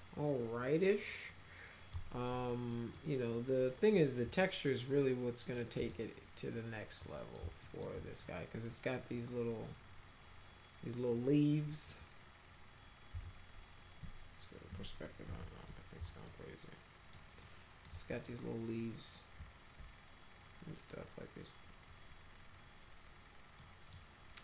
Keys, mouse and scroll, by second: 2.7 middle click, 4.4-5.5 alt+middle drag, 5.8 click, 7.0 click, 7.6 alt+middle click, 8.7-9.1 middle drag, 13.1 z, 14.7 p, 15.3 z, 15.7 alt+middle click, 16.3 alt+middle click, 17.4 alt+middle click, 18.1 middle click, 23.6-23.9 middle drag.